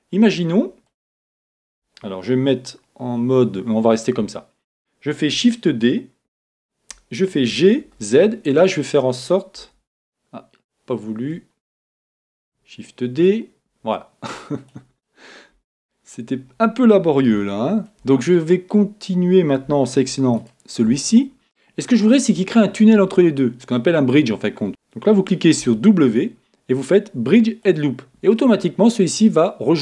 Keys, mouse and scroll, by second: 5.7 shift+d, 11.2-13.1 middle drag, 13.2-14.9 drag, 15.1-16.9 middle drag, 17.0-17.4 scroll down 1, 17.4-19.2 middle drag, 20.4-22.1 right drag, 22.5-24.4 middle drag.